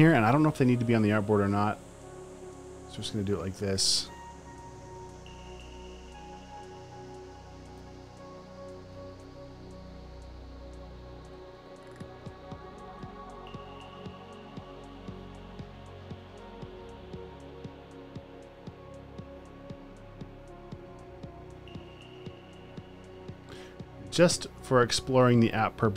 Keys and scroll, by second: 7.1-9.2 typing, 11.5 super+d.